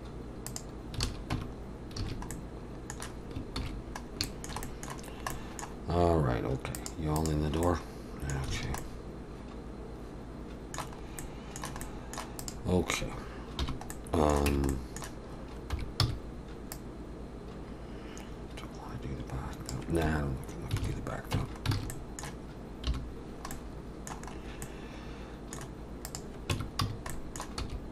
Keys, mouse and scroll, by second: 1.0 alt+a, 1.3 Tab, 1.7 scroll down 2, 2.0 alt+a, 2.3 middle click, 3.6 ctrl+s, 4.1 scroll up 1, 4.3 shift+middle click, 4.6 middle click, 5.0-5.9 scroll down 3, 5.3 middle click, 6.8 click, 7.2 click, 7.6 middle click, 8.5 alt+a, 8.8 middle click, 11.0 scroll up 2, 11.2 middle click, 11.8 middle click, 12.4 click, 13.6 /, 13.9 middle click, 14.5 Tab, 14.7 middle click, 15.7 3, 16.0 c, 20.8 alt+a, 21.3 Tab, 21.8 alt+a, 21.9 middle click, 22.9 /, 23.2 scroll down 2, 23.5 middle click, 24.3-24.9 scroll up 2, 24.6 middle click, 26.1 click, 26.5 Tab, 26.8 a, 27.1 middle click, 27.6 s.